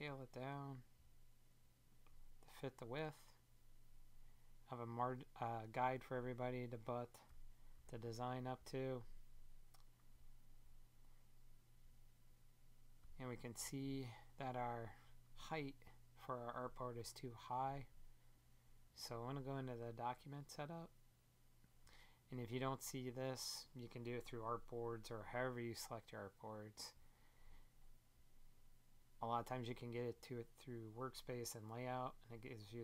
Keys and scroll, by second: 7.2 Down.